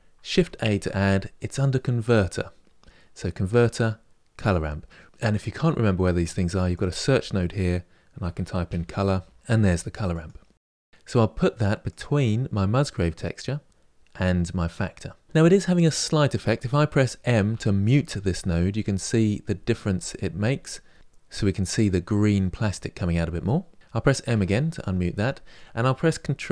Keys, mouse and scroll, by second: 15.2 m, 17.2 m, 18.5 m, 19.1 m, 19.7 m, 20.1 m, 24.0 m.